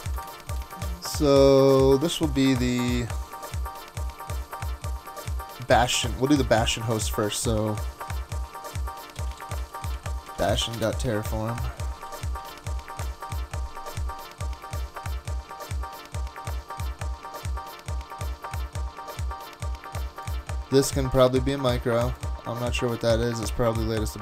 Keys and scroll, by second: 0.7 shift+super+Tab, 8.8-12.0 typing, 12.5 super+v.